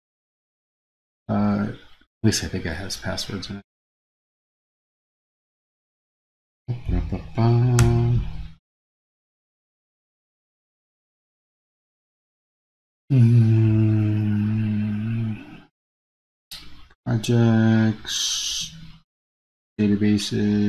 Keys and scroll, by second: 7.9 super+o.